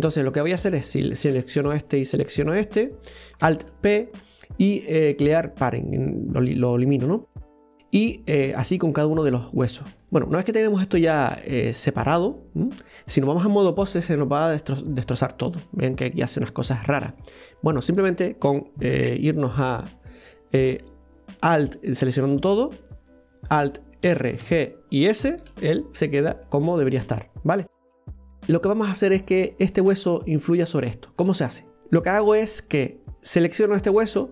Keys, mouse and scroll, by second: 0.9 right click, 2.3 shift+right click, 3.4 alt+p, 7.1-8.8 middle drag, 8.8 scroll up 1, 8.9-10.0 middle drag, 10.0 shift+right click, 10.1-13.0 middle drag, 14.0-15.6 drag, 15.6-15.9 scroll down 1, 15.9-17.2 middle drag, 17.2 scroll up 1, 18.9 KP_1, 22.4 a, 24.1 alt+r, 24.4 alt+g, 25.2 alt+s, 26.2 scroll down 2, 26.5-27.7 middle drag, 27.7 right click, 28.1-29.1 middle drag, 29.1 right click, 31.7-34.3 middle drag.